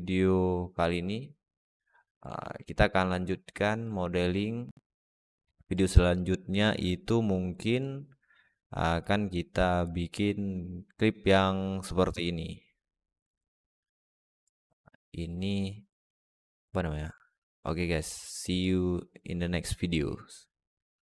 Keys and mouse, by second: 2.1-2.6 middle drag, 3.7 middle drag.